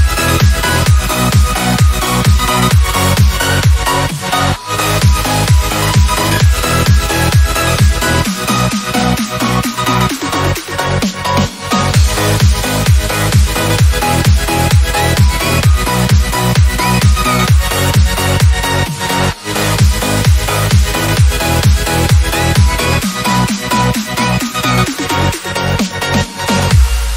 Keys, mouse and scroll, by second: 0.8 ctrl+click, 4.9 click, 5.7 ctrl+v, 6.7 Return, 7.9 click, 8.9 ctrl+c, 9.8 ctrl+click, 13.1 ctrl+v, 13.8 Return, 17.3 click, 26.9 click.